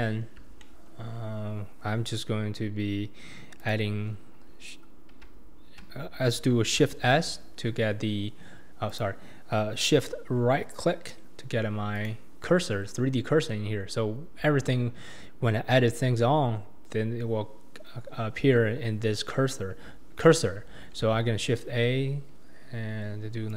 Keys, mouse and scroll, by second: 0.2-0.6 scroll down 2, 0.6-2.0 shift+middle drag, 2.0-3.6 scroll down 1, 3.6 click, 7.1 shift+s, 12.0 shift+right click, 21.0 shift+a.